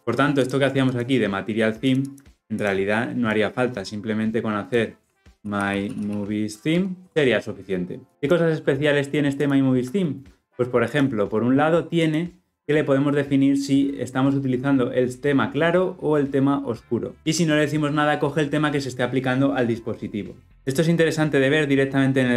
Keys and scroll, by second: 6.7 Return, 7.1 ctrl+alt+o, 9.3 ctrl+b.